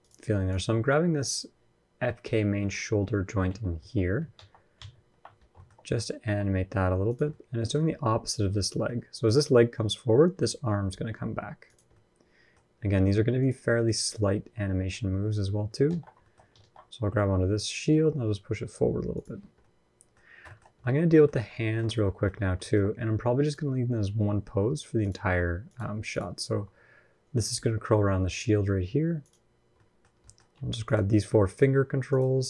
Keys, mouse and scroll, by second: 2.4 middle click, 3.2 KP_1, 3.5 KP_3, 4.1 ctrl+KP_1, 4.5 ctrl+KP_3, 5.2 scroll down 2, 5.3 shift+middle click, 5.5-5.8 scroll up 1, 5.9 r, 7.1 middle click, 8.4-8.9 scroll down 3, 8.6 middle click, 9.2 scroll up 1, 10.1-10.9 scroll up 1, 10.1 r, 11.7 middle click, 12.4-13.2 scroll up 1, 13.2 click, 14.5 KP_1, 14.8 KP_3, 15.6 alt+z, 16.0 shift+middle click, 16.2 scroll down 2, 16.4 alt+z, 17.7 r, 19.2-20.0 scroll down 2, 19.4 middle click, 20.0-20.6 scroll up 5, 20.2 shift+middle click, 20.6 middle click, 21.3-22.9 shift+scroll up 6, 21.3 shift+middle click, 21.8 middle click, 22.4 shift+middle click, 23.2 click, 23.9 r, 25.1 r, 25.9 click, 26.3 r, 27.2 r, 27.2 ctrl+z, 27.7 r, 29.0 click, 29.5 middle click, 29.9 scroll up 1, 30.0 middle click, 30.6 shift+click, 31.2 click.